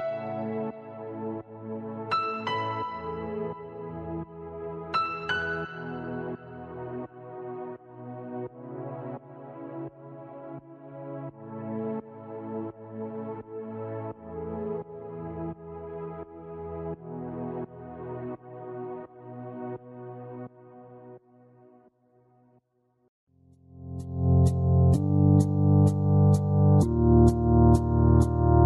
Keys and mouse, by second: 0.1 space, 1.9 click, 7.6 click, 8.1 click, 10.1 click, 11.1-12.6 typing, 11.3 click, 12.1 click, 17.4 click, 17.4 b, 17.4 space, 17.6 click, 18.3 click, 18.3 KP_1, 18.4 KP_0, 21.5 shift+Page_Down, 21.5 click, 21.5 KP_1, 23.5 shift+Page_Down, 23.5 Return, 23.5 KP_0, 23.5 KP_1, 25.0 shift+Page_Down, 26.2 click, 26.8 shift+Page_Down, 26.8 click, 27.0 shift+Page_Down, 27.0 click, 27.0 KP_1, 27.2 Return.